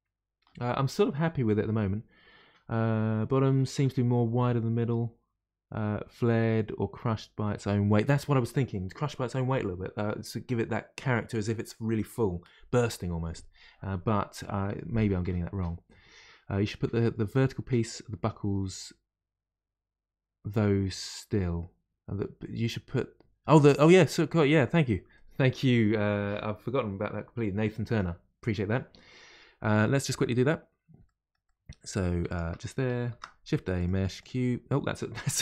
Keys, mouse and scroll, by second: 8.0-11.0 middle drag, 29.8-30.2 middle drag, 30.2-31.4 scroll up 1, 31.4-32.2 middle drag, 32.2-33.0 shift+right drag, 33.0 shift+a, 35.3 ctrl+z.